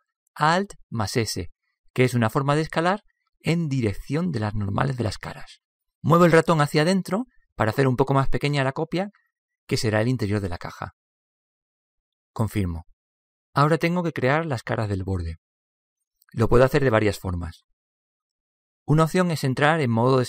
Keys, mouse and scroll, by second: 1.5 alt+s, 13.4-15.3 middle drag.